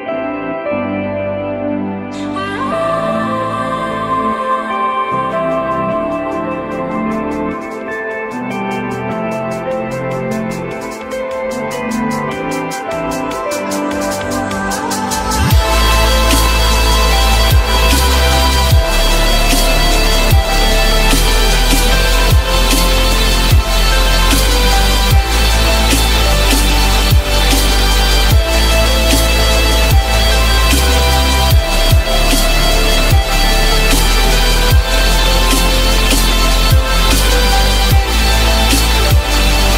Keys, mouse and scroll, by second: 14.3 ctrl+click, 19.3 F3, 19.8 F3, 26.9 ctrl+click, 28.9 alt+click, 30.0 alt+click.